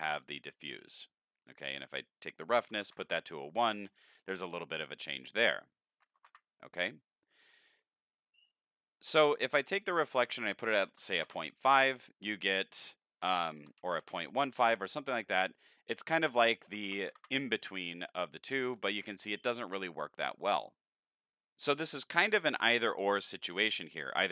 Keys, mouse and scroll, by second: 1.8 click, 5.5 click, 6.9 click, 7.6 click, 8.4 middle click, 10.0 click, 12.9 click, 16.0 click, 24.0 click.